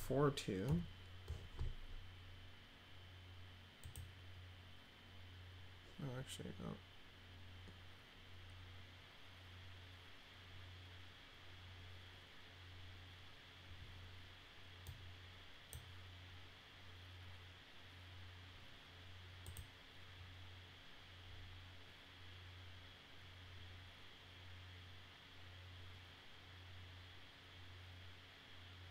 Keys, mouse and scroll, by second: 0.6 4, 3.8 click, 14.8 click, 19.4 click.